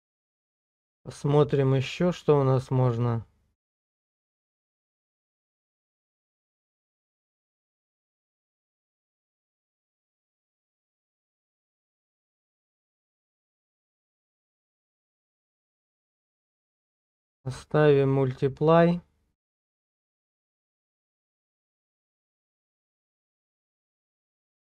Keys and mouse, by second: 0.8-7.4 drag, 8.3 middle click, 12.4-22.4 drag.